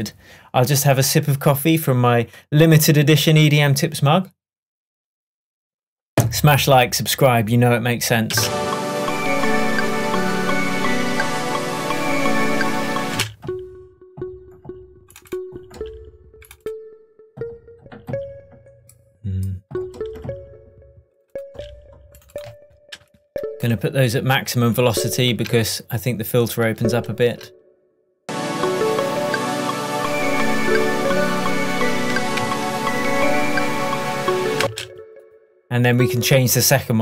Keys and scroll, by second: 8.4 space, 13.2 space, 32.4 super+d, 34.6 space.